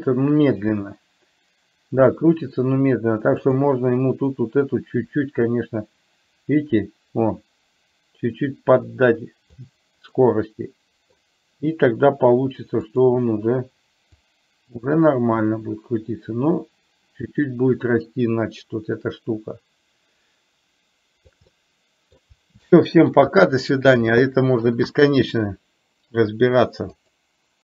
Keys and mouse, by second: 3.5 click, 5.2-9.7 drag, 10.2-11.2 middle drag, 12.8 click, 14.3-21.5 drag, 21.6 middle click, 22.7 shift+middle click.